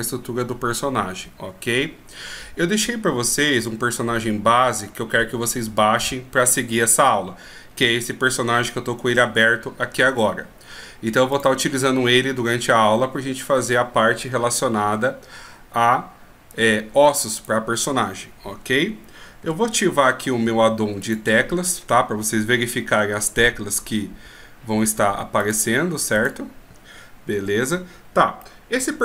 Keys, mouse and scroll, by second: 25.6-26.4 drag, 27.6 n, 28.6 middle click.